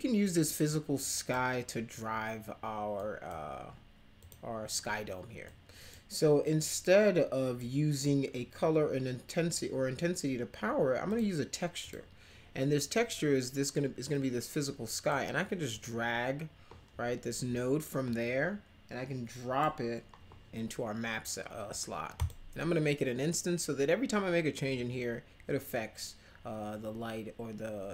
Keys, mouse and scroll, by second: 0.6-1.3 drag, 2.9 click, 4.2 click, 5.4-5.9 drag, 6.4-7.5 drag, 11.0 click, 11.8 click, 14.1 click, 15.7-19.6 drag, 22.1 click.